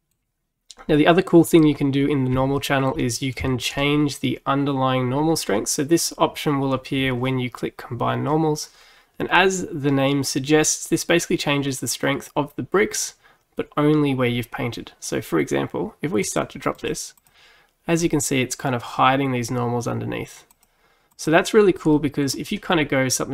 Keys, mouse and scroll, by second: 1.5 click, 2.6-3.8 shift+middle drag, 3.8-5.7 scroll up 2, 5.7-6.9 scroll up 1, 8.8 scroll down 1, 16.3-20.3 drag, 20.5-22.0 drag, 22.0-23.3 middle drag.